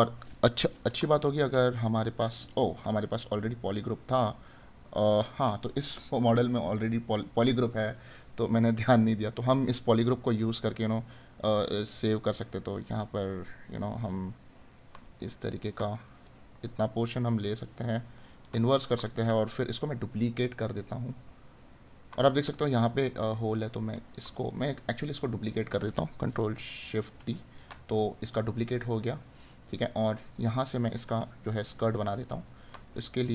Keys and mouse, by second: 1.5 right click, 7.0 right click, 10.2 right click, 15.9 right click, 18.7 right click, 21.8 right click, 31.2 right click, 32.8 right click.